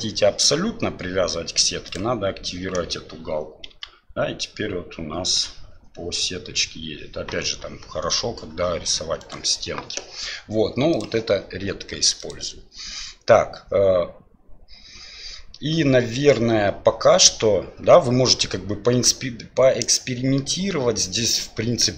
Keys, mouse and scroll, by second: 3.7 g, 12.3-21.9 drag.